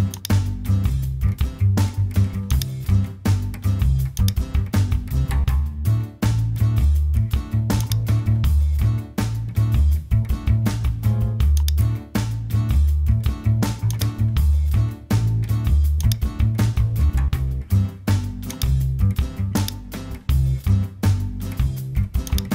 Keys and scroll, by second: 1.3 super+t.